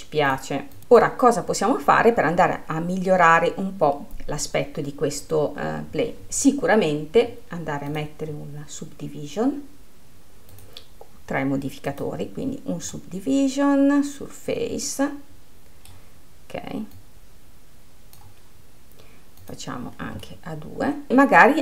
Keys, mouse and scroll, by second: 1.2-4.3 drag, 8.5 click, 11.1-13.6 drag, 13.6-17.6 middle drag, 17.6-20.9 drag, 20.9 middle click.